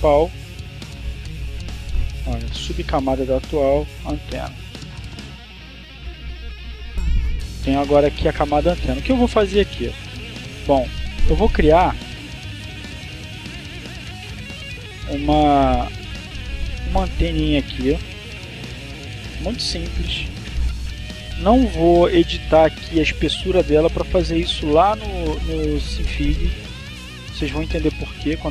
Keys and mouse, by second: 0.0 click, 1.1 click, 2.1-3.2 drag, 3.7-5.2 typing, 5.9 click, 10.6 click, 12.1 click, 15.7 click, 16.5 right click, 18.3 click, 19.0 click, 20.5 click, 23.5-25.0 drag, 26.4 click, 27.3 click.